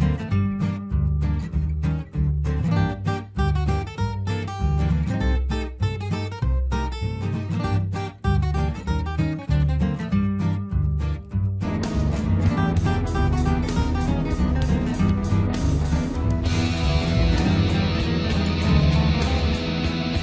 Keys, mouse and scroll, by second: 1.5 F2, 1.5-9.7 drag, 9.7 Escape, 10.0 F4, 10.8 click.